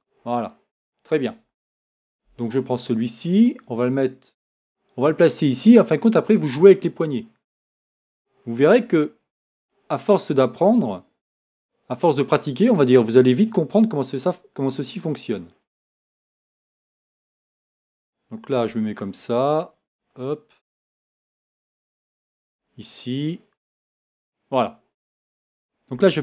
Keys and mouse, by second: 4.7 right click, 8.8-10.3 right drag, 12.1-14.3 right drag, 15.6-17.4 drag, 18.5 g, 25.9 e.